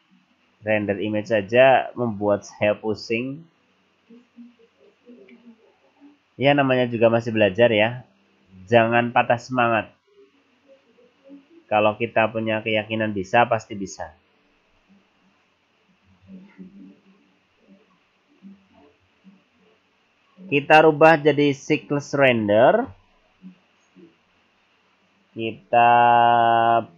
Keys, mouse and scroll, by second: 20.9 click, 23.3-23.7 scroll up 5, 24.4-25.1 scroll up 4, 25.1-25.4 scroll down 1, 25.4 scroll up 2.